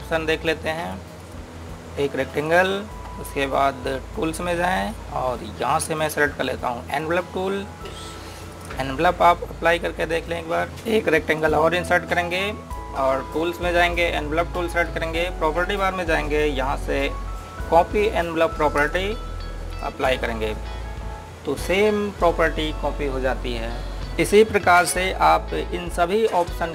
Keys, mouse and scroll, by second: 1.6 click, 12.2 click, 19.6 click, 25.6 click.